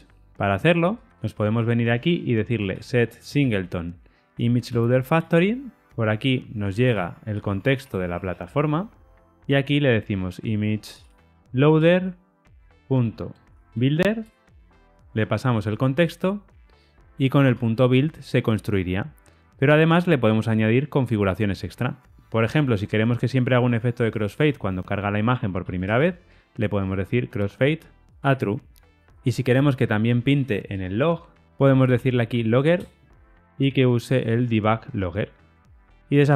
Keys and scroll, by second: 4.8 Return, 11.8 Return, 14.2 Return, 17.4 Tab, 27.4 Return, 32.7 Return, 34.7 Return.